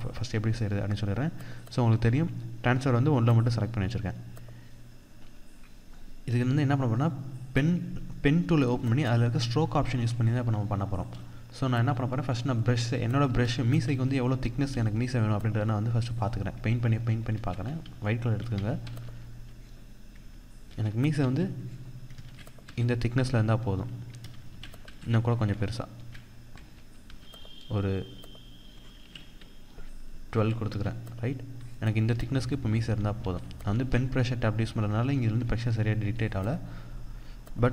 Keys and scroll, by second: 9.8 ctrl+=, 11.7 ctrl+=, 12.7 ctrl+=, 12.9 ctrl+space, 13.4 ctrl+=, 16.8 ctrl+z, 20.3 ctrl+z, 23.0 ctrl+z, 31.7 ctrl+z, 32.9 ctrl+z.